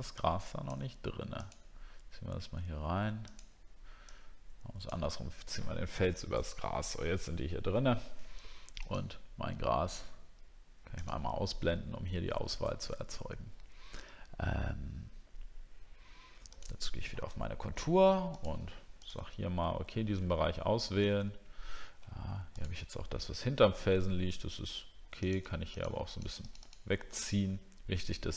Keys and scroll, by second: 21.1 ctrl+scroll down 1.